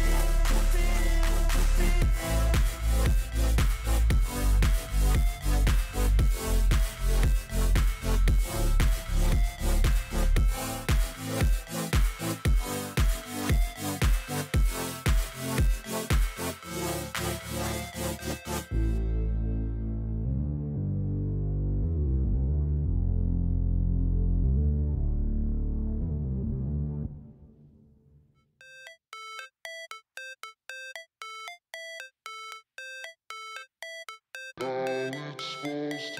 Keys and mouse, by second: 1.6-2.8 drag, 4.9 click, 5.4 click, 8.0 shift+click, 11.1 click, 11.7 click, 14.6-16.0 drag, 17.0 click, 18.9-20.5 drag, 21.6 click, 23.9-25.4 drag, 28.1 click, 28.5 click, 29.1 click, 31.3-32.6 drag, 33.4 click, 34.2 click, 35.6 click.